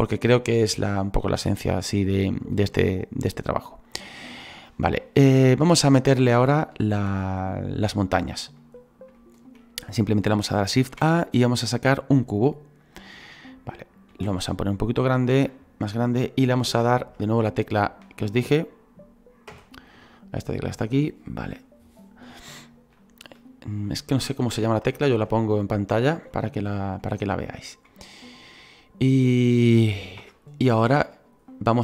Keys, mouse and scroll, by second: 5.0-6.1 middle drag, 6.1 click, 8.6-12.9 middle drag, 12.9 shift+a, 14.1 s, 19.5 /, 20.3 scroll down 4, 20.9-24.5 middle drag, 24.5 /, 24.8 /, 25.1 /, 26.3-30.2 middle drag, 30.2 /, 30.9-31.5 scroll down 5, 31.5-31.8 middle drag.